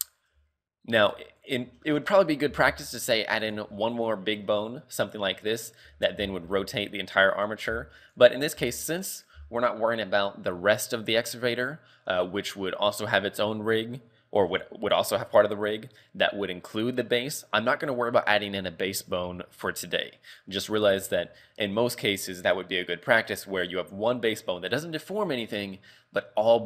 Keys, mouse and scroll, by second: 0.2 shift+middle click, 0.7-1.1 scroll up 1, 1.1 a, 1.4 right click, 1.9 shift+middle click, 2.5 e, 3.7 z, 3.8 scroll down 3, 4.1 middle click, 4.6 middle click, 5.5 middle click, 5.9 KP_3, 6.0 scroll up 2, 6.2 z, 6.6 shift+middle click, 7.4 right click, 7.7 x, 8.6 z, 9.4 z, 14.5 right click, 19.6 right click.